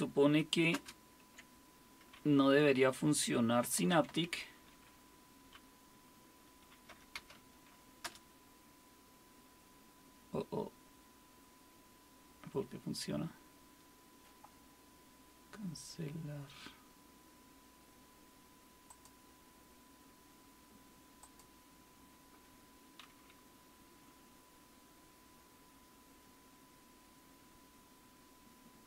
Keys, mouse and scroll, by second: 0.7 super+space, 3.5-4.6 typing, 6.9-7.8 typing, 8.0 Return, 18.9-28.8 drag.